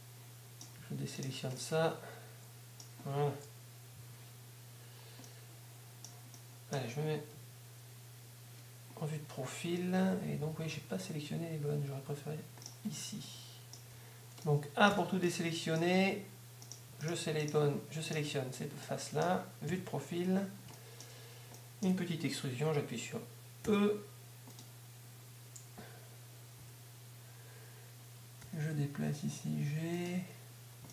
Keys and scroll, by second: 0.1 z, 3.9-4.7 typing, 8.2 KP_3, 16.1 a, 20.2 3, 24.1 e, 28.1 z, 28.4 g, 30.1 g.